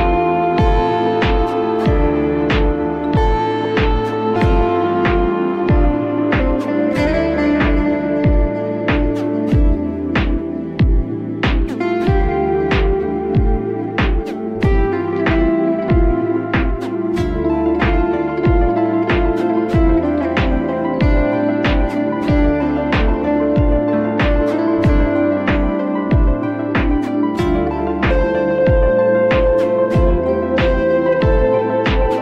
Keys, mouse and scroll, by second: 0.3 click, 0.6 Tab, 1.0 click, 1.6 shift+click, 2.1 shift+click, 2.4 shift+click, 2.8 shift+click, 3.1 shift+click, 4.0-4.5 scroll up 2, 4.5 click, 5.5 click, 6.2 shift+click, 6.5 shift+click, 6.8 shift+click, 7.1 shift+click, 7.4 shift+click, 8.3 u, 12.2 click, 13.3 r, 15.9 g, 17.9-18.9 scroll up 2, 18.9-20.6 shift+middle drag, 20.6 s, 24.2 g, 28.1 s.